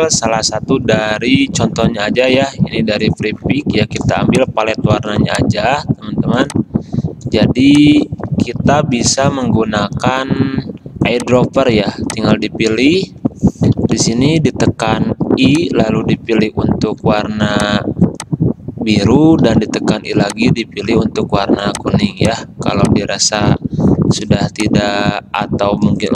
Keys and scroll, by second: 4.3 space, 5.1 v, 7.7 space, 9.1 m, 14.0 i, 17.2 v, 19.6 i, 24.5 space.